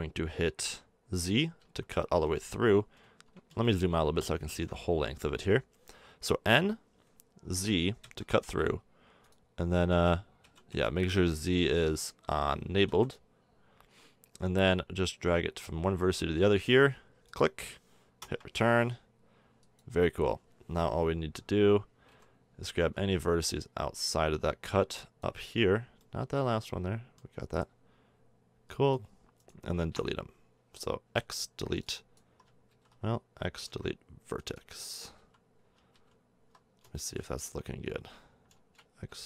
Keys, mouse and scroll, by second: 3.6-4.6 middle drag, 6.3 k, 20.6 a, 22.1 v, 22.8 c, 29.4-31.1 drag, 30.0 z, 31.1 x, 32.7 ctrl+z, 33.6 x, 35.1 z, 35.9 ctrl+z, 36.9 middle click, 39.1 x.